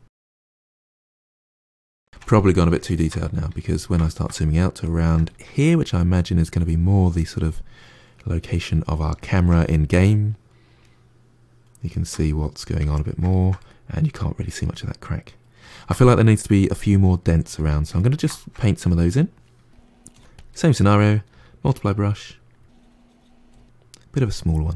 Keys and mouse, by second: 0.8 middle click, 1.7 click, 2.0-20.0 ctrl+middle drag, 20.0 f, 20.5 middle click, 21.2 f, 22.2-23.4 drag, 23.4 f, 24.0-24.7 drag.